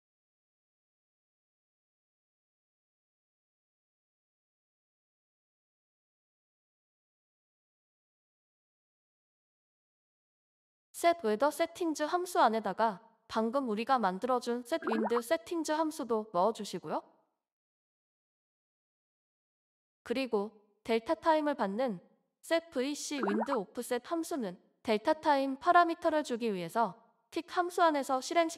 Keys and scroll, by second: 14.5-15.6 typing.